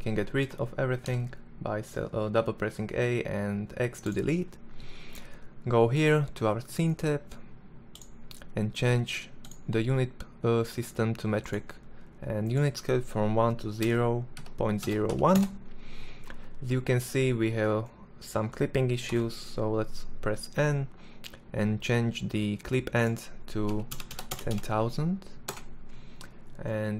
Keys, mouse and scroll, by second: 0.7 x, 16.2-18.7 middle drag, 18.7 n, 23.7 KP_0, 24.1 KP_0.